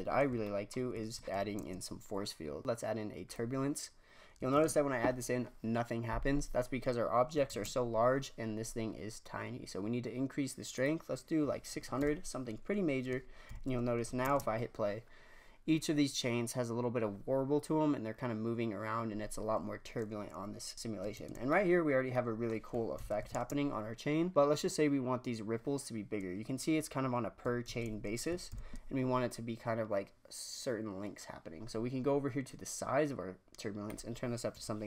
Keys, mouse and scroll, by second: 0.4-1.2 shift+middle drag, 1.5 shift+a, 3.8-4.5 scroll up 2, 4.5 shift+space, 7.5 shift+space, 10.7-11.8 drag, 11.8 KP_0, 13.4 shift+Left, 14.2 shift+space, 21.2 shift+space, 21.7-22.9 middle drag, 22.9 shift+Left, 23.3 shift+space, 27.6 shift+space, 28.4 shift+Left, 33.8-34.8 drag.